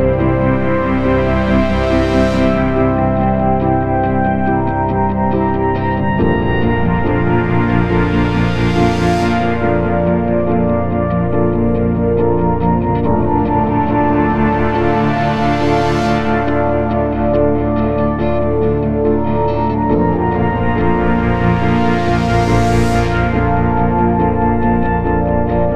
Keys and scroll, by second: 0.5 F3, 0.9 ctrl+d, 1.0 Escape, 3.2 o, 3.3 t, 3.5 Return, 3.8 BackSpace, 6.3 ctrl+d, 6.4 Escape, 10.7 F1, 16.0 t, 16.2 Return, 16.7 F1, 20.9 BackSpace, 21.1 Return, 25.4 Return.